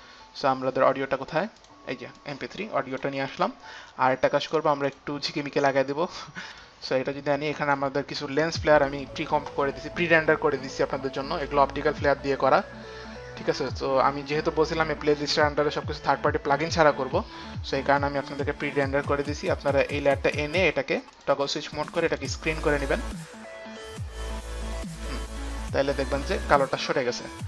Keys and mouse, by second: 2.1 click, 2.4 click, 5.0 click, 6.8 click, 8.8 click, 9.2 click, 10.2 click, 11.6 click, 14.0 click, 20.0 click, 21.4 click, 22.3 click, 24.8 click, 25.2 click, 27.0 click.